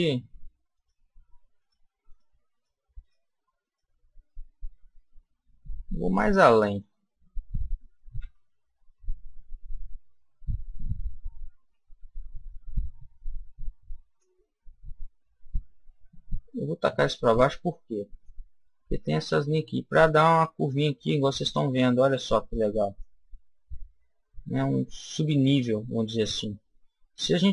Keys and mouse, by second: 4.8 middle click, 5.2 click, 5.2 right click, 5.5-7.5 middle drag, 8.1 e, 14.1 click, 22.8 click.